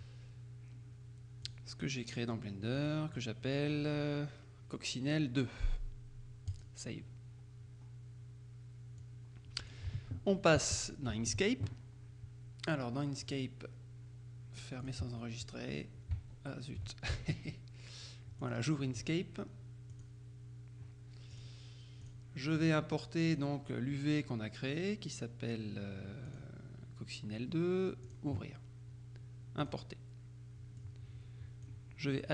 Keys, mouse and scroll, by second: 1.5 click, 2.9 click, 6.6 click, 9.1-10.3 drag, 10.0 alt+Tab, 10.8 Tab, 13.3 click, 14.9 click, 15.2 click, 16.5 alt+Tab, 18.5 click, 20.0 click, 21.4 click, 22.1 click, 23.3 click, 26.4 click, 28.1 click, 29.7 click, 30.9-32.2 drag.